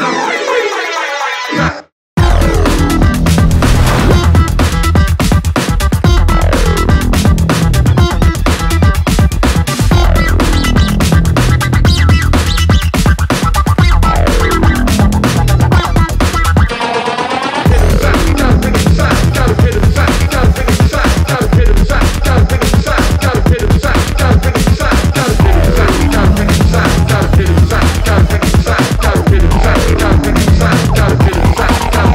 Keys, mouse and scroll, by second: 4.6-6.5 drag, 10.1 space, 16.2 space, 17.8 click, 19.3 scroll up 1, 19.6 scroll down 1, 20.4 click, 20.6 right click, 21.4 click, 28.8 Return, 29.3 shift+b, 29.5 shift+g, 30.4 Return, 31.4 click.